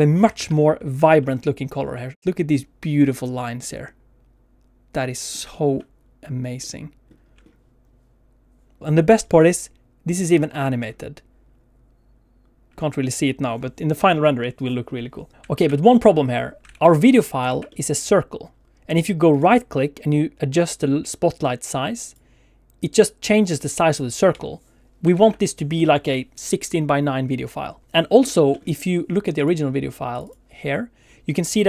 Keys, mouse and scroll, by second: 15.3 alt+a, 15.3 click, 15.3 scroll down 1, 15.5 alt+shift+z, 15.9 middle click, 16.7 alt+shift+z, 17.0 click, 17.5 alt+shift+z, 17.7 middle click, 19.3 right click, 24.3 Escape, 25.1 alt+shift+z, 27.9 scroll up 1, 28.3 shift+middle click, 28.5 middle click.